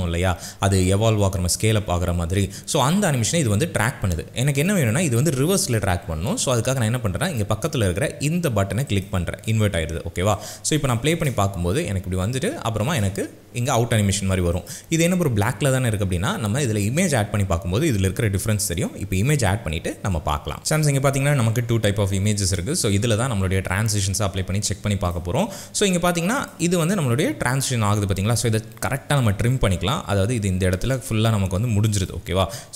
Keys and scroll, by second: 11.2 space.